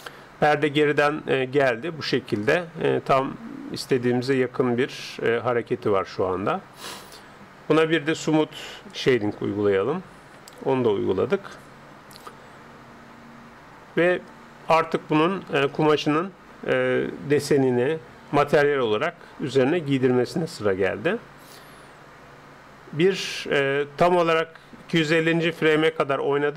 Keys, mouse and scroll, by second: 1.0-2.6 middle drag, 4.0-5.6 middle drag, 9.0-10.8 drag.